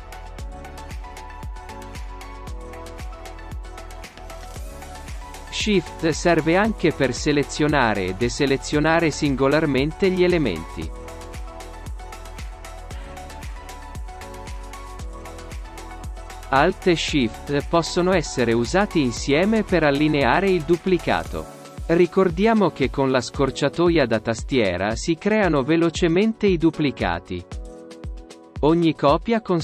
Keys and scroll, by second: 20.0 ctrl+alt+shift+space.